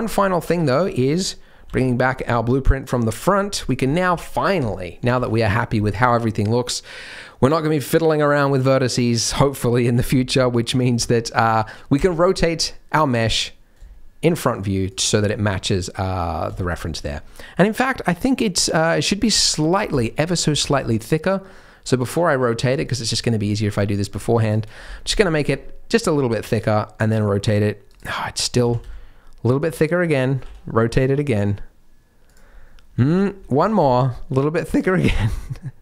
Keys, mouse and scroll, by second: 0.1-1.0 scroll down 2, 0.5 Tab, 1.9 alt+h, 2.8 click, 3.2 scroll up 1, 3.5 click, 3.8 scroll up 3, 4.2 shift+middle click, 5.2 ctrl+s, 10.4 shift+middle click, 10.7 scroll down 1, 11.0 shift+middle click, 11.9 r, 15.2-15.7 scroll down 4, 15.4-15.9 scroll up 7, 16.3 scroll down 1, 16.5 shift+middle click, 17.0-17.9 scroll down 1, 17.9-18.2 scroll up 2, 19.3 ctrl+z, 19.9 shift+middle click, 20.4 s, 24.9 scroll down 3, 25.2 shift+middle click, 25.4-26.0 scroll up 1, 26.0 r, 28.6 s, 30.4 r, 33.0 ctrl+z, 33.5 s, 34.9 r.